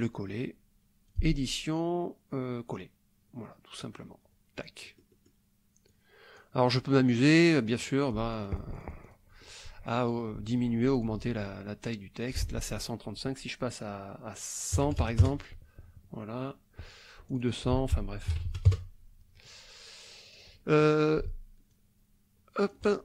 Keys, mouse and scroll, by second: 1.1 click, 2.7 click, 3.8-5.5 drag, 5.9 click, 7.6-9.3 drag, 11.0 click, 12.2 ctrl+click, 12.5 ctrl+a, 14.8 KP_1, 14.8 KP_0, 15.2 KP_Enter, 17.3 click, 17.8 ctrl+a, 18.3 ctrl+KP_2, 18.4 ctrl+KP_0, 18.7 ctrl+KP_Enter, 20.3 click, 21.7-23.0 ctrl+drag.